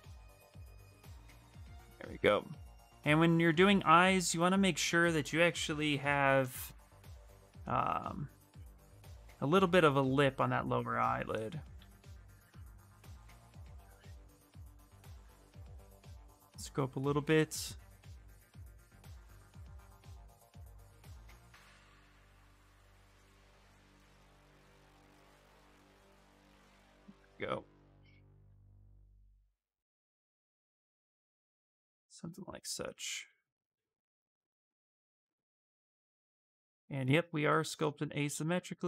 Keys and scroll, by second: 11.7 s, 15.1 ctrl+d, 28.1 s.